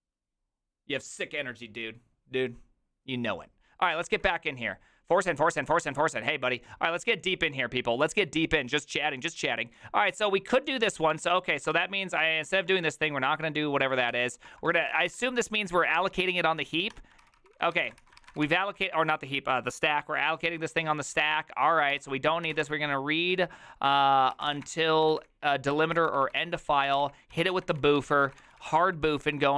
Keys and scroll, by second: 4.1 ctrl+w, 11.3 alt+{, 11.7 ctrl+c, 12.4-15.9 typing, 16.9 Tab, 17.0-19.1 typing, 20.2-29.5 typing, 25.7 ctrl+y, 26.0 ctrl+c.